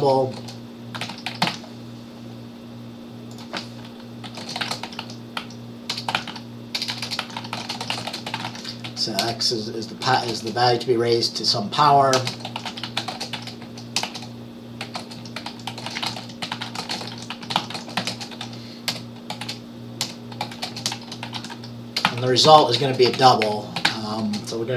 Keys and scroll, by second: 0.0-2.0 typing, 4.3-10.5 typing, 12.0-24.4 typing.